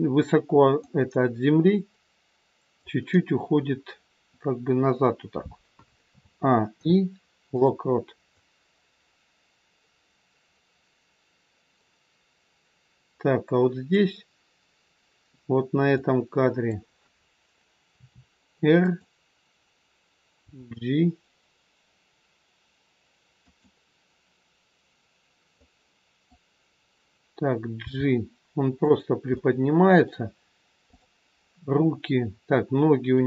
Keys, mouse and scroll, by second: 0.9 click, 6.0 a, 6.7 i, 8.4 click, 16.0 click, 17.9 r, 20.4 g, 25.6 click, 27.8 g, 29.3 middle click, 30.9 click, 31.8 scroll up 2, 33.0 click.